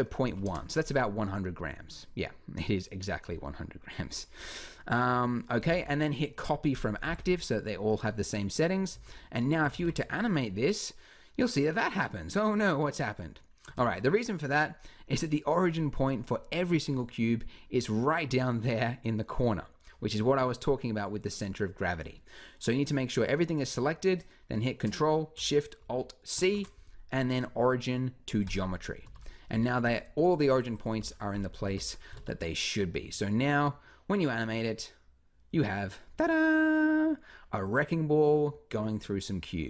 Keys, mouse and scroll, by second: 5.4 t, 6.9 t, 8.7 z, 9.5 alt+a, 13.4 Escape, 28.9 ctrl+alt+shift+a, 29.4 z, 30.7 z, 31.5 a, 37.4 middle click.